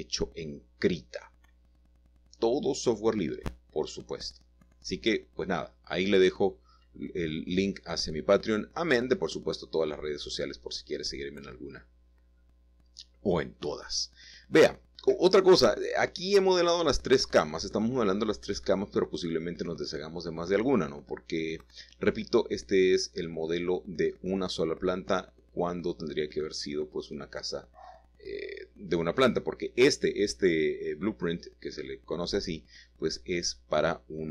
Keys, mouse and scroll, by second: 0.0 click, 0.6 typing, 2.0 click, 2.9 typing, 3.5 Escape, 4.3-4.9 typing, 7.4 click, 8.5-9.6 middle drag, 11.2 middle click, 11.6-12.5 scroll down 2, 13.0 shift+middle click, 13.7 shift+middle click, 16.2 middle click, 17.4 middle click, 17.9-18.7 scroll up 1, 18.7 shift+middle click, 19.5 middle click, 20.6-22.1 shift+middle drag, 21.0-22.1 scroll down 1, 24.8 typing, 25.6-27.1 shift+middle drag, 27.2 Tab, 28.8 shift+a, 30.2 click, 32.5 s, 32.8 z.